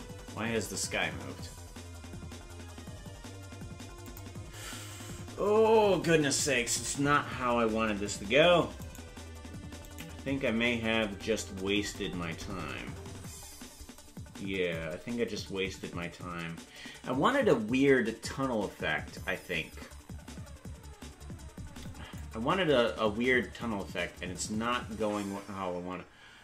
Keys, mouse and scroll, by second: 8.9 right click, 11.1 scroll down 4, 12.1-12.6 scroll down 10, 13.0-13.6 scroll down 5, 22.2-26.4 drag.